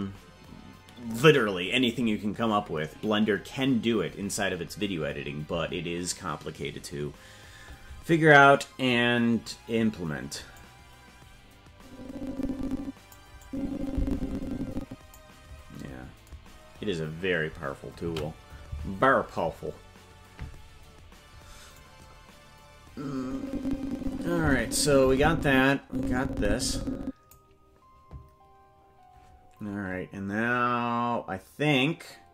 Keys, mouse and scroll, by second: 10.6-13.1 drag, 13.4-15.2 drag, 16.5-17.8 scroll down 10, 20.2 ctrl+s, 21.8-27.3 drag.